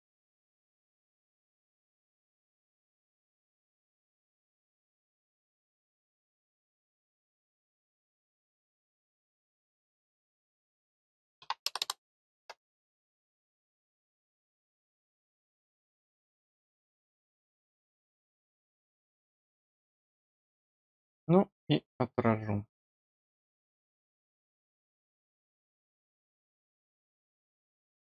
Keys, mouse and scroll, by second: 2.7 click, 3.9 click, 5.8-6.9 scroll down 2, 6.9 click, 9.2 click, 13.7 scroll down 2, 17.0 click, 18.8-19.2 scroll up 4, 19.6 click, 23.2 click, 25.3 click, 27.1 scroll down 2, 27.8 middle click.